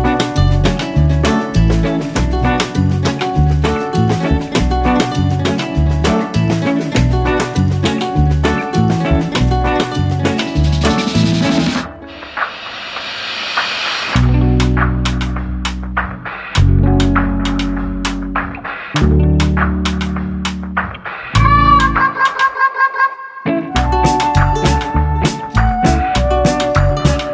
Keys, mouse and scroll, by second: 1.2 x, 3.1 KP_1, 5.3 shift+a, 6.1 n, 8.3 s, 8.7 click, 10.3 click, 10.6 click, 12.5-13.6 scroll up 5, 14.3 click, 15.3-16.1 scroll up 1, 16.1 scroll up 1, 17.5 click, 18.6 click, 22.5 click, 23.6-24.8 scroll up 2, 24.8-25.5 scroll down 1, 26.6 Tab.